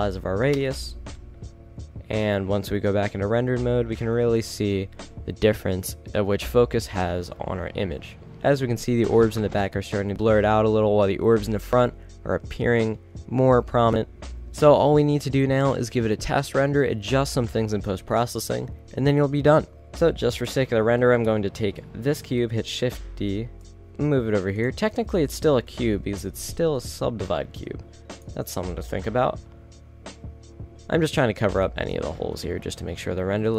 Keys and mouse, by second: 0.7 KP_0, 1.5 shift+z, 20.4 shift+z, 23.6 shift+d, 26.8 shift+s, 27.4 shift+d, 33.3 a.